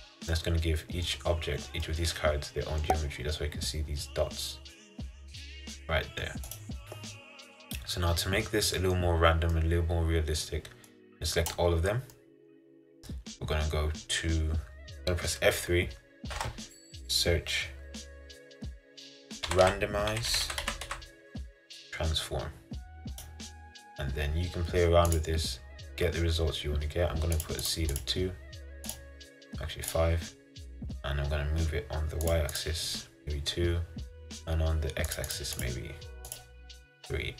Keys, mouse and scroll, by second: 1.4-1.9 scroll up 5, 1.9-5.5 middle drag, 5.5-6.0 scroll down 1, 6.0 middle click, 6.4 scroll up 1, 6.7 click, 7.0-9.2 middle drag, 9.2-9.7 scroll down 2, 9.7-11.6 middle drag, 11.6 click, 12.2-23.3 middle drag, 27.6-37.2 drag, 37.2 middle click.